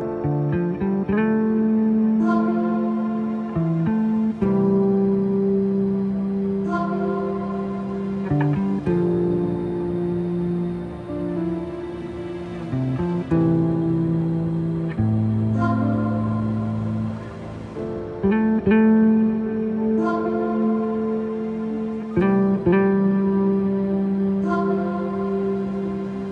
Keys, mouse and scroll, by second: 0.1 space, 0.2 click, 0.5 alt+scroll up 1, 1.2-3.4 drag, 3.4 alt+scroll down 1, 3.6 space, 3.6 click, 3.9 space, 4.1 alt+scroll up 1, 4.3-7.2 drag, 7.2 alt+scroll up 1, 7.8-11.2 drag, 13.8 click, 15.2 alt+scroll down 1, 16.6 alt+scroll up 1, 16.9 scroll down 1, 18.1 click, 21.1 click, 23.7 click.